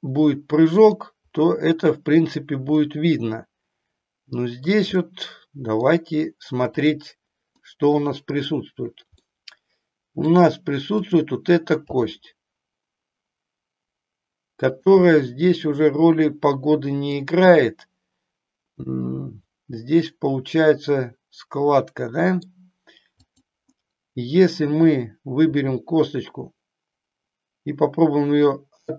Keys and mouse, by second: 2.8-4.8 middle drag, 5.0 middle click, 6.7 click, 7.7 middle click, 9.3-10.3 middle drag, 12.7 g, 14.9 click, 15.2-17.3 middle drag, 17.7-22.5 middle drag, 23.3 click, 25.4 r.